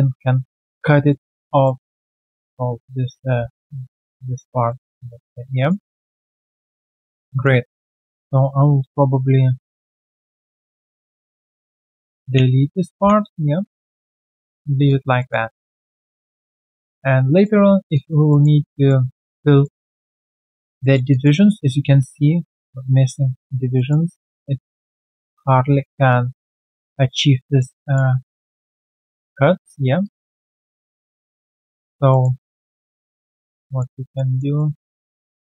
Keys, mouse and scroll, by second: 1.0 alt+middle click, 1.4 alt+click, 1.9 alt+click, 2.0 alt+click, 3.9 typing, 4.3 alt+click, 5.1 alt+middle click, 5.5 alt+click, 5.8-6.2 alt+scroll down 1, 6.2 alt+click, 7.3 alt+click, 7.7 alt+double click, 8.8 double right click, 10.4 shift+click, 10.6 shift+double click, 12.3 ctrl+Delete, 12.9-13.8 typing, 13.3 right click, 14.3-14.8 alt+scroll down 1, 15.1 alt+click, 15.2 alt+middle click, 15.4 alt+right click, 15.7 alt+click, 16.0 alt+middle click, 16.3 alt+click, 17.9 alt+click, 18.2 alt+middle click, 18.5 alt+right click, 18.7 alt+click, 19.0 alt+right click, 19.6 alt+middle click, 19.9 alt+click, 20.2 alt+right click, 20.5 alt+click, 20.8 alt+middle click, 21.1 alt+click, 23.7 alt+middle click, 24.3 alt+middle click, 26.1 scroll down 1, 26.4 alt+middle click, 27.7 alt+click, 28.3 alt+middle click, 28.7 alt+click, 29.5 1, 29.6 scroll down 2, 30.0 alt+click, 30.3 alt+middle click, 30.6 alt+right click, 31.3 alt+middle click, 31.6 alt+right click, 32.1 alt+middle click, 32.3 alt+right click, 32.5 alt+click, 32.8 alt+middle click, 33.1 alt+right click, 33.6 alt+middle click, 34.2 alt+right click, 34.5 alt+middle click, 35.1 right click, 35.1 q.